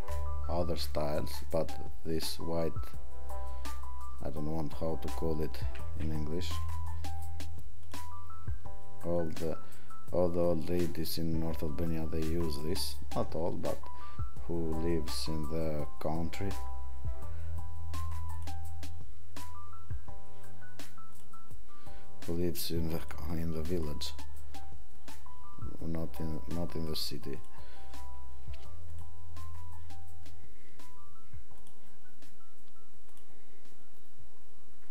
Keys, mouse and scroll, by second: 18.4 click, 22.9 click, 23.8 click.